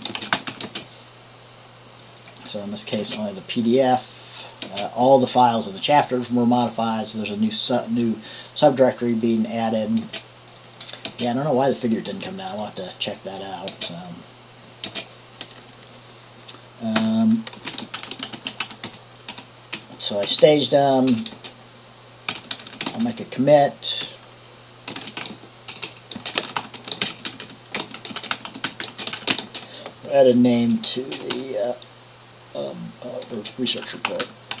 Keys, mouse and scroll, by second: 0.0-1.2 typing, 3.2 typing, 4.9 typing, 15.1 BackSpace, 17.2 Return, 18.1-20.6 typing, 21.7-32.4 typing, 33.6-34.6 typing.